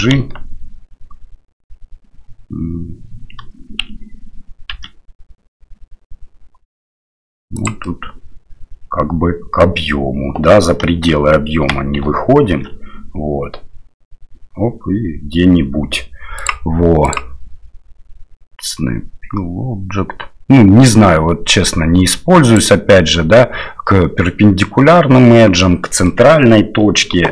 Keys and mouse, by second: 7.8-9.6 middle drag, 11.6 g, 17.1-25.6 drag, 26.0 middle drag.